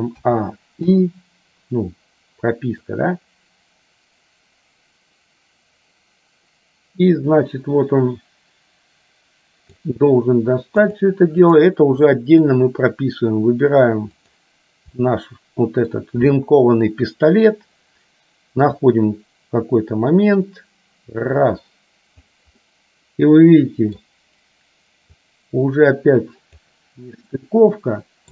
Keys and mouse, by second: 0.3 a, 1.1 i, 3.0-10.0 drag, 11.0 click, 12.1 middle click, 14.3 click, 15.1 middle click, 19.0-22.5 drag, 22.6-24.2 middle drag, 25.3-26.8 drag, 27.5-28.3 middle drag.